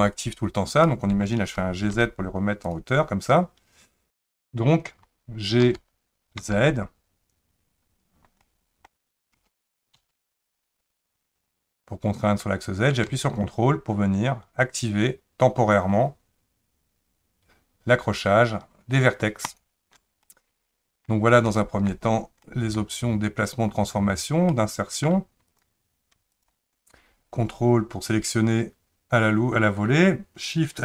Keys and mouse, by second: 0.9 middle click, 1.5 g, 8.5 middle click, 9.4 g, 20.2 middle click, 21.4 shift+middle click, 22.4 middle click, 24.5 middle click, 25.5 click, 26.4 ctrl+click.